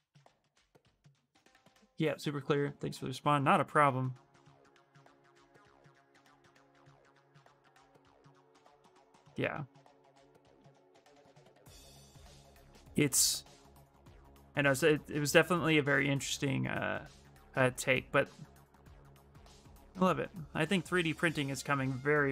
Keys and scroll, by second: 17.8 s, 19.3 s.